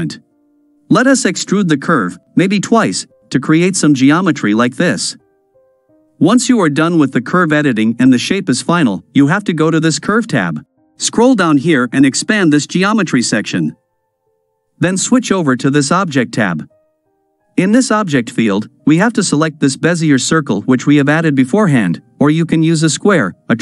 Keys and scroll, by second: 0.2 e, 2.4 e, 5.2 a, 5.7 KP_Decimal.